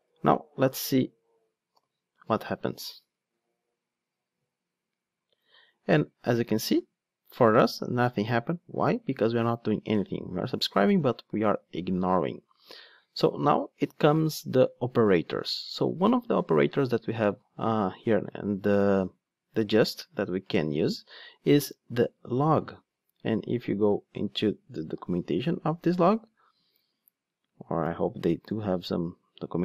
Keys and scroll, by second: 1.7 ctrl+d, 22.5 Return, 25.1 F1, 27.9 super+b.